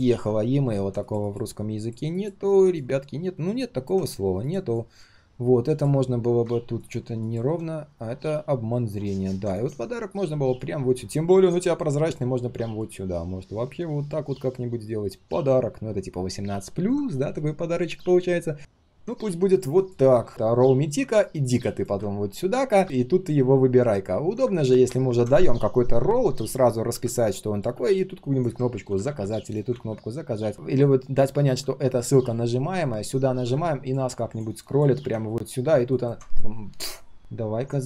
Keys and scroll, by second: 9.9 ctrl+], 28.7 ctrl+z, 29.7 ctrl+z.